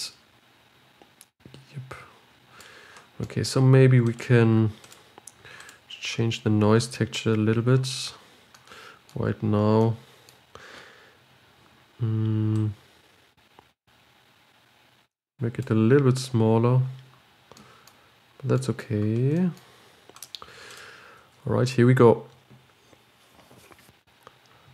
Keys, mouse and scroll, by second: 4.4-6.9 drag, 8.9-13.3 middle drag, 13.3-24.0 drag, 24.3-24.7 scroll up 4.